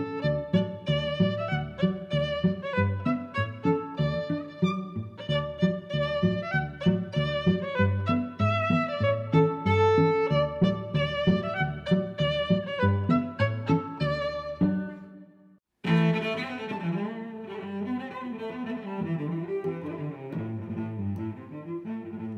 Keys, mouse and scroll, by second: 0.0 click, 0.5 click, 1.0 click, 1.5 click, 2.0 x, 2.3 click, 2.9 middle click, 3.6 middle click, 4.6 click, 5.3 click, 6.1 click, 7.4 s, 7.6 x, 8.8 click, 11.1 g, 11.4 x, 12.4 click, 13.1 click, 13.5 middle click, 14.4 middle click, 15.3 middle click, 16.0 shift+e, 16.1 y, 18.0 click, 18.8 i, 21.9 click.